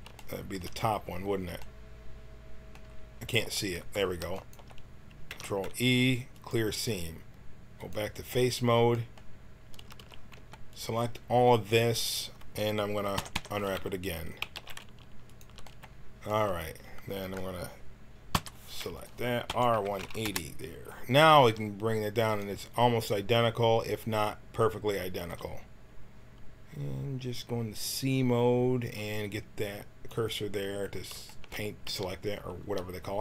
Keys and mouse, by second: 0.2 middle click, 0.3 click, 0.5-2.5 middle drag, 3.2 z, 3.4 z, 4.3 click, 5.3 ctrl+e, 7.8-9.8 drag, 9.8 a, 10.0 a, 10.3 b, 13.1 u, 13.3 u, 14.4 g, 18.3 l, 18.9 click, 19.5 r, 21.4 g, 25.1 c, 31.8 g.